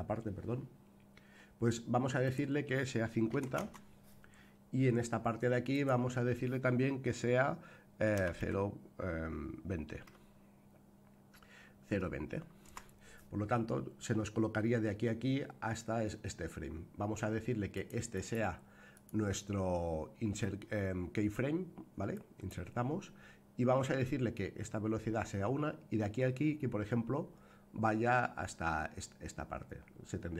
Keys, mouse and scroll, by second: 2.2-4.3 drag, 5.7-13.6 drag, 17.7 click, 18.9-28.9 right drag.